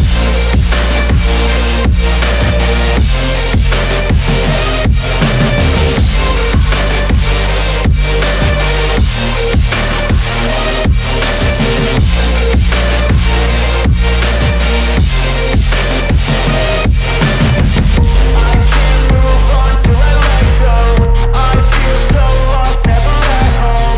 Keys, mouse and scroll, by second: 3.3 click, 18.2 click, 18.3 click, 21.1 click.